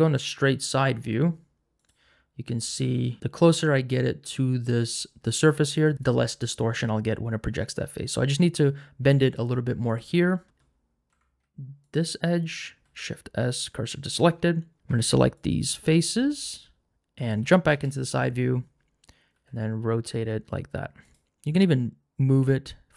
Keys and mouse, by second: 1.8 click, 2.9 g, 10.1 middle click, 11.1 2, 12.8 shift+s, 14.8 Tab, 14.9 3, 17.7 KP_3, 19.3 r, 21.0 click, 21.5 g.